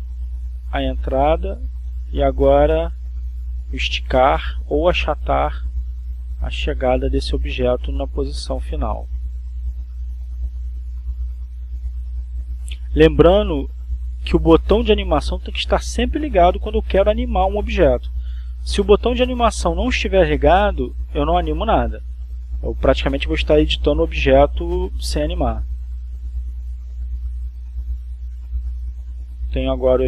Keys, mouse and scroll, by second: 0.8 click, 2.9 click, 4.6 click, 6.4 click, 7.7 click, 8.9 BackSpace, 10.6 Up, 11.0 Up, 14.5 Left, 15.5 Right, 16.2 Up, 18.0 Up, 21.6 Left, 22.2 Left, 23.1 Left, 23.9 Left, 25.4 Left, 27.8-30.0 drag.